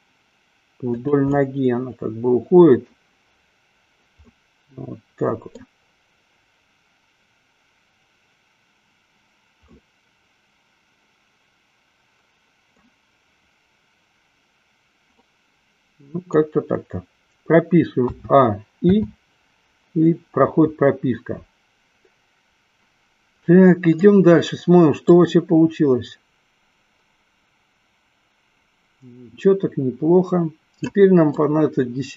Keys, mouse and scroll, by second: 1.4 click, 1.5-3.3 middle drag, 4.7-6.0 middle drag, 9.8-13.0 middle drag, 15.3-16.9 middle drag, 18.3 a, 19.3 i, 23.5 middle click, 25.7 click, 31.9-32.1 middle drag.